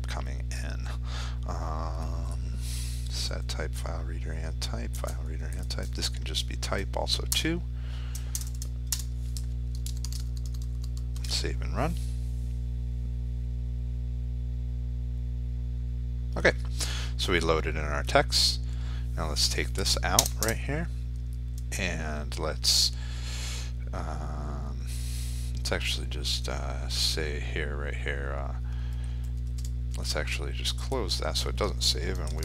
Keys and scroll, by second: 9.3 ctrl+s, 10.5 ctrl+r, 32.0 ctrl+shift+s.